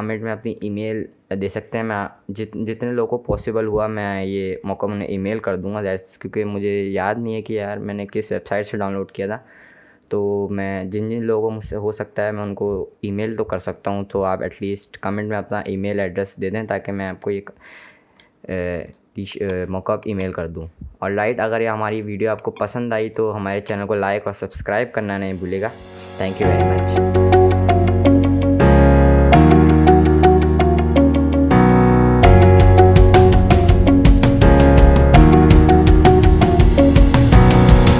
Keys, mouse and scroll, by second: 19.0 click.